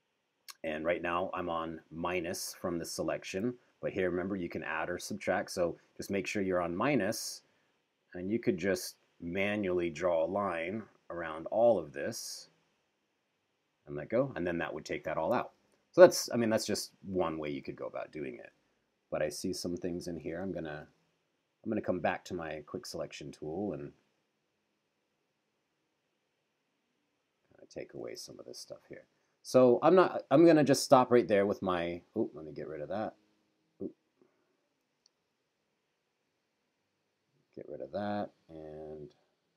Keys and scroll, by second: 15.6 super+-, 17.6 super+=, 20.6 super+=, 28.4 super+-, 35.0 super+z.